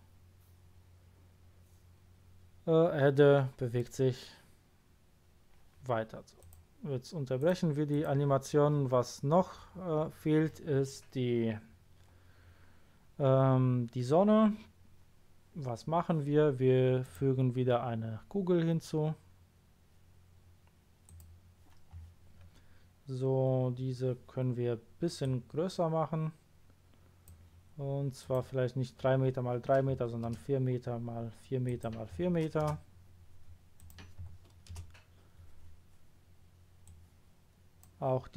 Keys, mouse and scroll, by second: 6.3 click, 7.3 click, 7.9 click, 9.3-10.4 middle drag, 13.2-13.5 scroll up 1, 13.5-13.9 scroll down 1, 17.0 click, 21.0 click, 25.2-26.9 drag, 28.2 click, 29.9 4, 30.2 Return, 31.6 click, 32.1 4, 32.6 Return, 33.7 click, 34.2 4, 34.7 Return, 36.8 click.